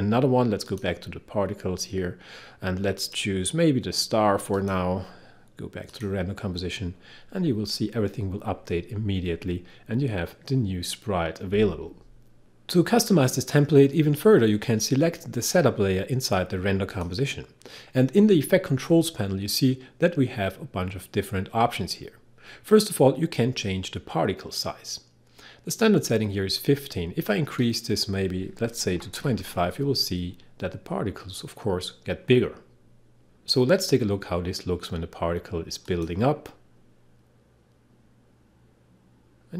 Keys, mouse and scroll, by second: 0.6 click, 3.0 click, 16.9 click, 35.9 click.